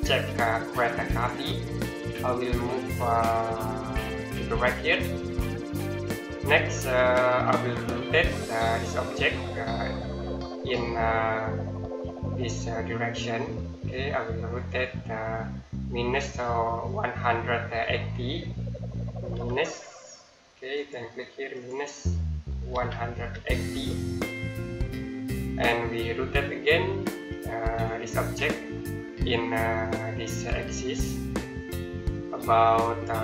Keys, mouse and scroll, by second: 0.9 click, 1.6 middle click, 3.2 click, 6.7 middle click, 10.6 click, 19.1 KP_Subtract, 20.6 click, 22.5 KP_1, 23.0 KP_8, 23.5 KP_0, 27.1 middle click, 30.5 click.